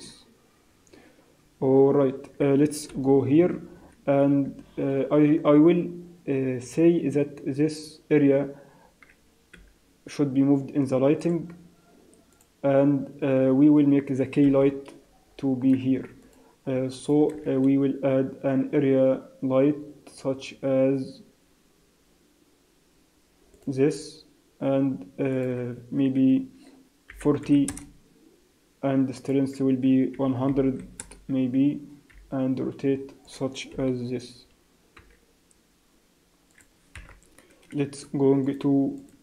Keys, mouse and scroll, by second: 0.3 z, 1.8 z, 2.9 KP_7, 3.3-3.7 scroll down 3, 3.7-4.1 scroll up 4, 9.5 m, 12.3 click, 14.4 KP_1, 15.2-16.2 scroll up 5, 16.2 click, 17.0 shift+right click, 17.4 shift+a, 25.3 click, 29.1 click, 30.6 0, 32.1 r, 33.3 click, 33.7 KP_7, 34.9 g, 36.9 KP_0, 38.4 click.